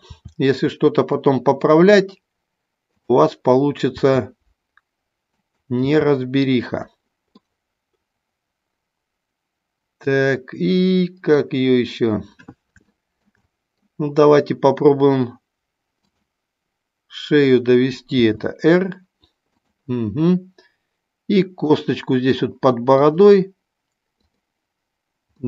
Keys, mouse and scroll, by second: 0.1 r, 3.0 click, 3.8 r, 5.5 click, 5.8 r, 6.7 click, 7.3-11.5 middle drag, 12.8 shift+middle click, 13.5 middle click, 18.1 r, 21.7 middle click, 22.9 click, 24.2 click.